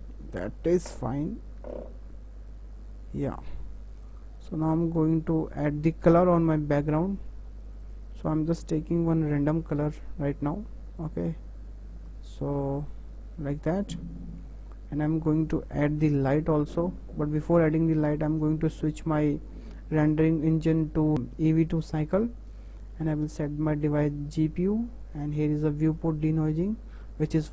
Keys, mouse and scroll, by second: 4.0 KP_0, 4.3-5.2 scroll down 8, 4.6 middle click, 5.2-5.9 shift+middle drag, 5.9 click, 7.9-9.7 drag, 13.9 click, 14.1 scroll down 2, 15.3 click, 16.2 Delete, 17.4 click, 21.1-22.1 drag, 23.0-27.5 drag.